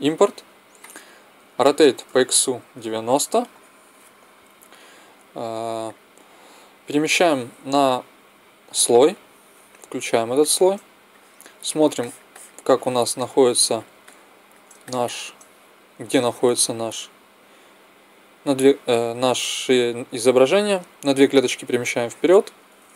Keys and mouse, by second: 0.0-1.5 drag, 1.5 r, 5.9-7.7 drag, 7.7 m, 10.4 click, 11.1-12.4 middle drag, 16.0 middle click, 17.0 click.